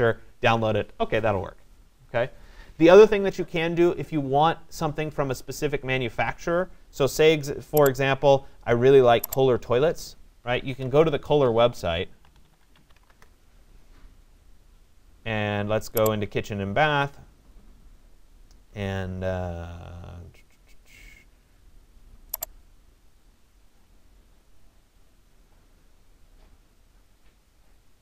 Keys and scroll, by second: 10.2-13.5 typing.